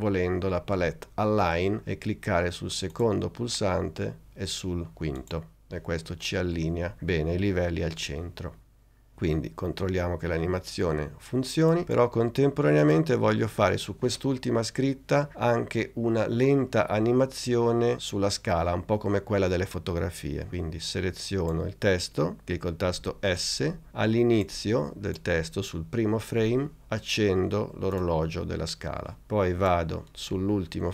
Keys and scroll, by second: 23.0 s.